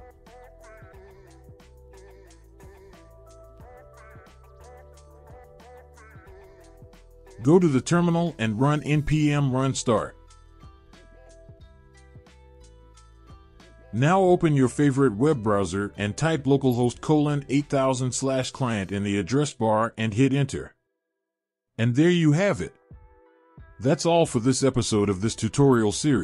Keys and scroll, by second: 10.2 Up, 10.4 Up, 11.8 Return.